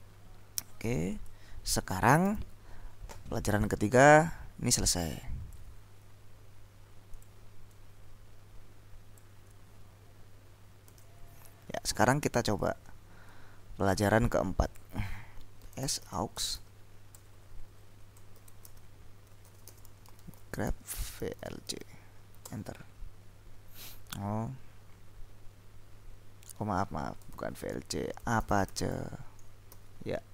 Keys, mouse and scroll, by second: 1.3 click, 2.3 ctrl+l, 4.4-6.2 drag, 7.2-9.8 drag, 11.0 ctrl+s, 12.0-13.4 drag, 14.7-15.4 scroll up 1, 15.5-22.3 typing, 22.6 Return, 26.7 Up, 27.3-29.6 typing, 29.8 ctrl+l.